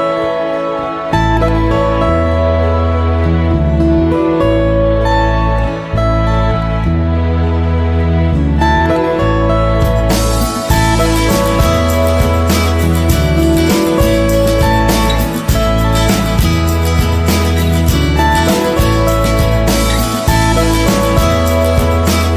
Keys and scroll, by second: 6.9 ctrl+z.